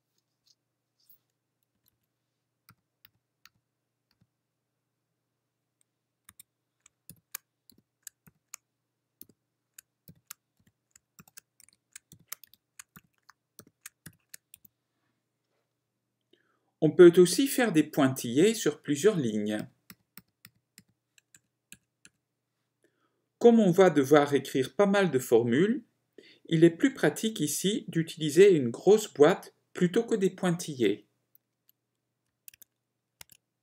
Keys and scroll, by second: 1.9 Left, 11.6-15.3 typing, 19.8 typing, 22.2 typing, 32.6 ctrl+Tab.